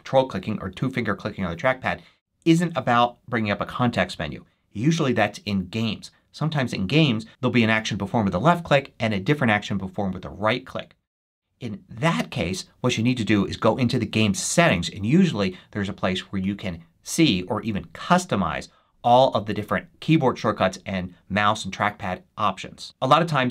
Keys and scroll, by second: 20.7 [.